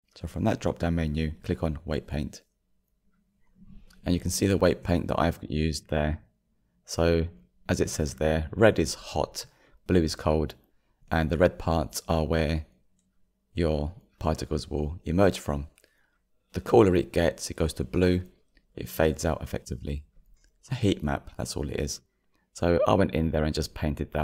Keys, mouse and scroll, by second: 3.2-4.6 drag, 4.6-6.2 middle drag, 6.2-6.6 scroll up 7, 9.5 scroll down 3, 9.9 middle click, 10.6-11.1 scroll up 2, 11.2-15.3 shift+middle drag, 15.3-15.7 scroll down 1, 15.7-17.3 middle drag, 17.3-18.0 scroll up 3, 18.2-20.0 shift+middle drag, 20.0-20.8 scroll up 3, 20.8-24.2 shift+middle drag.